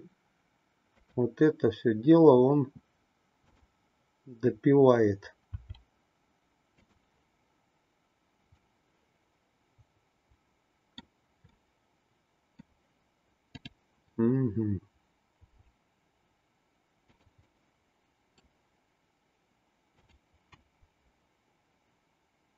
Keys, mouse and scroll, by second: 3.6-4.8 drag, 5.4 r, 8.5-11.0 middle drag, 11.6-12.7 middle drag, 13.4-15.0 drag, 15.3 r, 17.4-18.4 middle drag.